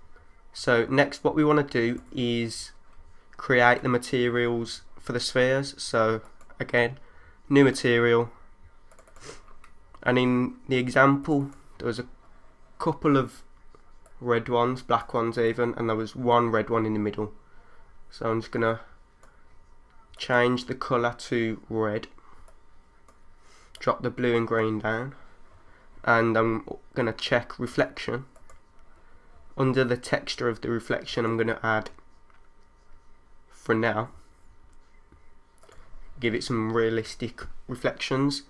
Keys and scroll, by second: 1.2 3.